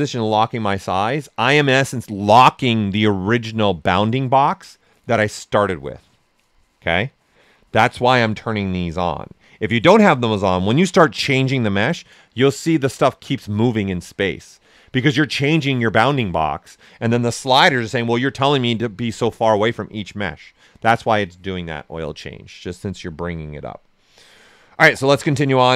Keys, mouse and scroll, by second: 23.3-25.7 drag.